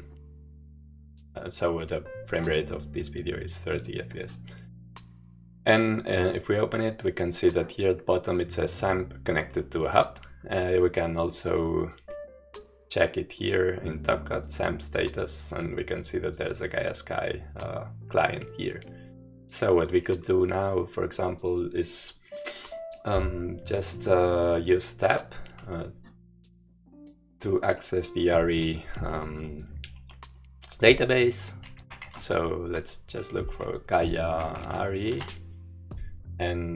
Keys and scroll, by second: 31.4-32.6 typing, 34.1-35.7 typing.